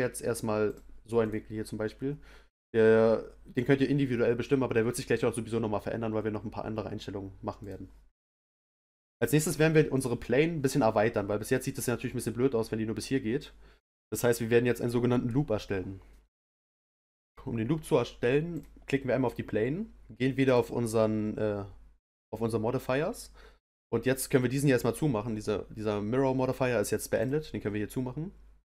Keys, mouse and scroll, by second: 1.2 click, 7.6 click, 9.9 click, 18.5 click, 20.4 click, 27.1 click, 28.6-28.7 drag.